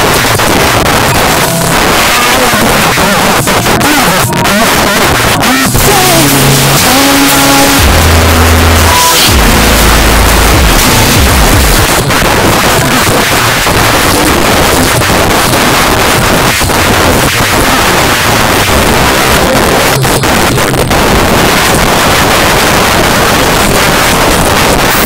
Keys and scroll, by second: 11.8 Page_Down.